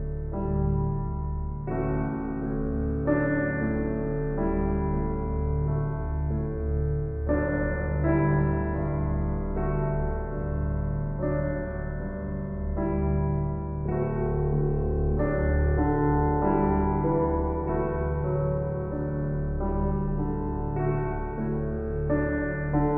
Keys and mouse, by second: 0.0-0.9 typing, 1.2 Return, 5.0-6.5 drag, 5.4 Tab, 6.5 alt+a, 7.4-8.7 drag, 8.7 b, 8.8-10.7 drag, 11.0 shift+s, 11.8 click, 12.7 Tab, 15.1 click, 15.1 typing, 17.2 click, 18.6 s, 21.0 click.